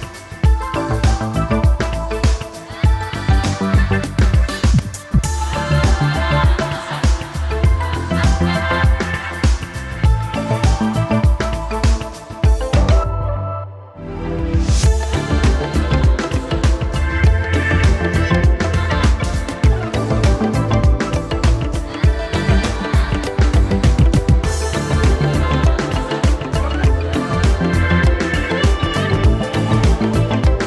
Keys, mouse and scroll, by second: 1.0 space, 4.8 0, 8.0 0, 10.8 Delete, 10.9 typing, 11.9 Tab, 13.6 BackSpace, 14.7 1, 18.0 BackSpace, 18.2 1, 22.1 Left, 22.6 BackSpace, 22.7 1, 23.4 Return, 25.0 0, 29.0 0.